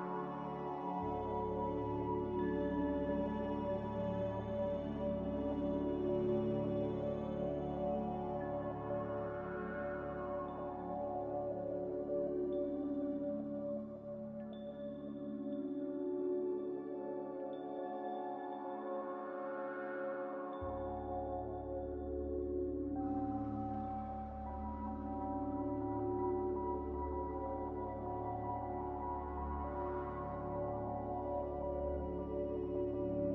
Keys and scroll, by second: 0.3 ctrl+z, 0.6 ctrl+z, 1.4 b, 3.1 Delete, 4.9-5.9 typing, 15.4 a, 19.8 ctrl+z, 21.7 Delete, 25.1 n.